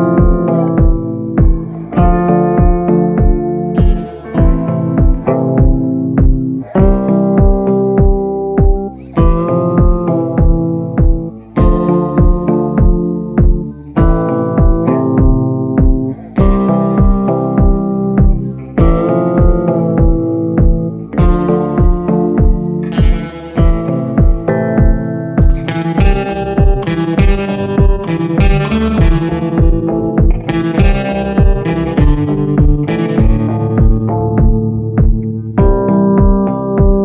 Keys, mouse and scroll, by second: 3.4 ctrl+a, 3.9 ctrl+a, 22.8 ctrl+a.